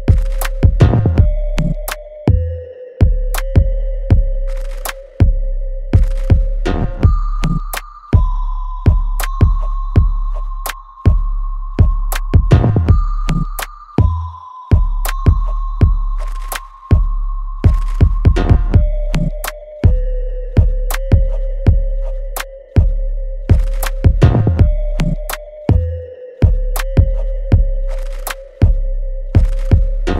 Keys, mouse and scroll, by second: 0.6-1.9 alt+middle drag, 1.9-3.2 drag, 3.2-4.8 alt+middle drag, 5.9 click, 6.8 alt+click, 8.5 scroll down 1, 9.1 click, 9.7-10.2 scroll up 1, 11.3-15.2 middle drag, 15.2 click, 17.1-26.9 ctrl+drag, 26.9 click, 28.5-30.1 ctrl+drag.